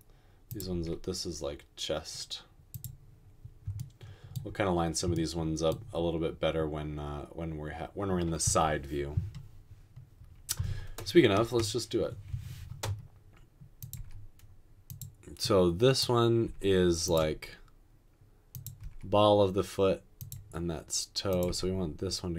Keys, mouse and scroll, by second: 0.9 typing, 11.5 typing, 14.0 typing, 16.4 typing, 18.8 typing, 21.5 typing.